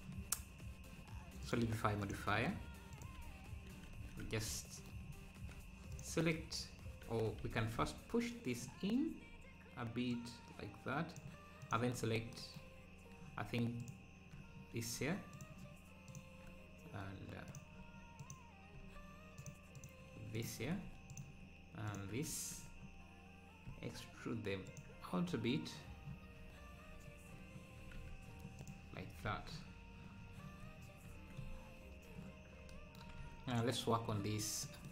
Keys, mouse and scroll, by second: 4.2 Tab, 5.9 click, 7.4 a, 7.7 `, 8.8 scroll up 2, 9.0 `, 10.1-12.0 drag, 12.0 `, 12.8 scroll down 2, 13.8 ctrl+click, 14.6-15.2 scroll down 3, 15.3-17.8 shift+drag, 17.8 Tab, 18.2-20.4 drag, 21.1-22.2 shift+drag, 22.6-23.0 scroll up 2, 23.7 e, 27.0 scroll up 2, 27.9 Tab, 28.3 scroll down 4, 28.6 click, 29.3 ctrl+s, 30.2-31.0 scroll down 5, 31.4 scroll up 3, 33.2 ctrl+s, 33.5 click, 34.3 scroll down 1, 34.6 middle click.